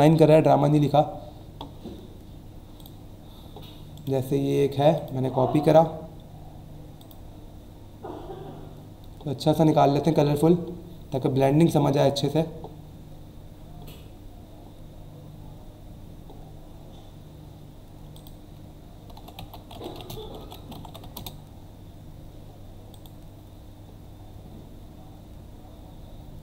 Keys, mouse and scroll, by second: 1.2 scroll down 1, 2.8 click, 3.9 right click, 4.9 click, 7.0 click, 8.0 scroll down 1, 8.7 scroll down 1, 9.4-10.4 scroll down 3, 11.6-12.3 scroll down 2, 13.3 scroll down 1, 14.0 scroll down 1, 14.7 scroll down 1, 15.4 scroll down 1, 18.1 click, 18.9-21.5 typing, 22.9 click.